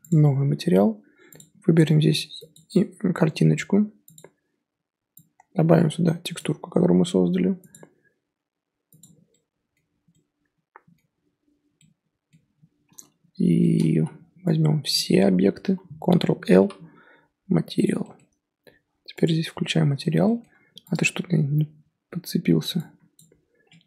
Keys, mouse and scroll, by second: 0.1-7.2 drag, 7.6 click, 8.9 click, 9.3-9.8 middle drag, 9.8 scroll up 2, 10.1-11.6 middle drag, 11.6 scroll down 3, 11.7-12.5 middle drag, 12.5-13.3 scroll up 1, 13.6-13.9 shift+middle drag, 13.9 z, 14.1-14.9 scroll down 1, 14.9 click, 15.7 z, 17.8 ctrl+l, 18.0-19.1 middle drag, 19.1 click, 19.4 middle drag, 19.7 scroll up 1, 20.0-20.9 shift+middle drag, 20.9 click, 23.1 click, 23.7 Tab.